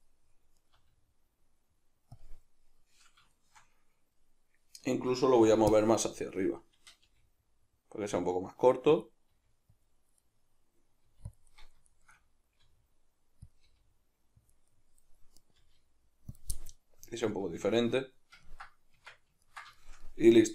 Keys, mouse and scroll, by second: 0.6 right click, 0.7 g, 2.2 click, 3.3-9.0 shift+middle drag, 5.4 b, 7.0 g, 9.0 click, 9.3 g, 9.9 click, 10.2-11.4 middle drag, 11.0 g, 11.4 click, 11.5-13.6 middle drag, 12.6 r, 13.6 click, 13.6 g, 14.5 click, 14.7-15.4 middle drag, 15.4 right click, 15.6 g, 16.4 click, 16.6-20.5 middle drag, 19.0 Tab.